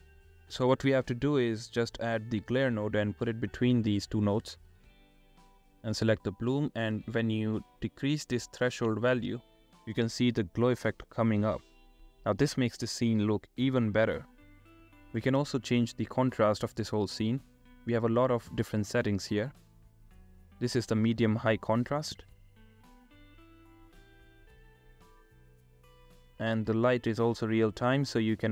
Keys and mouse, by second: 1.4 click, 3.4 click, 5.3-6.2 drag, 8.7 click, 13.5-16.1 drag, 16.5-18.2 drag, 18.8-19.9 shift+drag, 22.1 click, 24.4 click, 24.6 r, 24.8 z, 28.0 click, 28.0 r, 28.0 z.